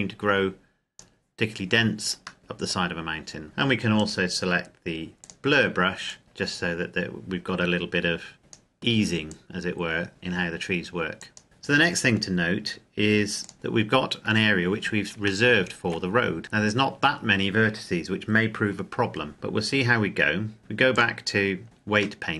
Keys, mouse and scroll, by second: 2.4 middle click, 2.8 scroll down 1, 3.4 middle click, 4.0 click, 13.5 middle click, 15.5 shift+middle click, 16.4-17.0 scroll up 1, 17.0 scroll down 1, 21.0 click, 22.2 middle click.